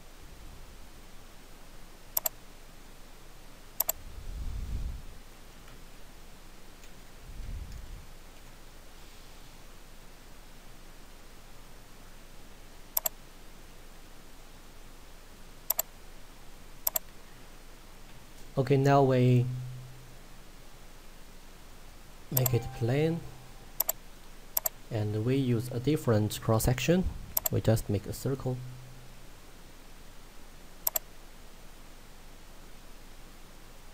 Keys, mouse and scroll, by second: 2.3 right click, 3.9 click, 5.2-8.1 typing, 8.5 Return, 13.1 click, 15.8 click, 22.4 click, 25.3-27.4 scroll up 1, 27.4 click, 30.9 click.